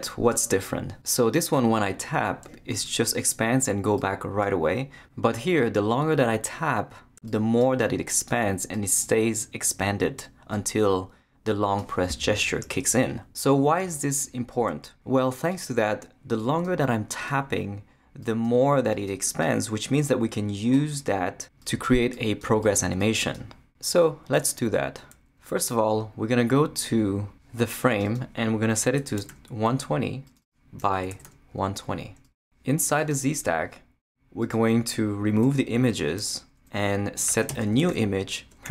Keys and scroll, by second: 28.7-31.7 typing, 35.4 shift+BackSpace, 37.0-38.7 typing.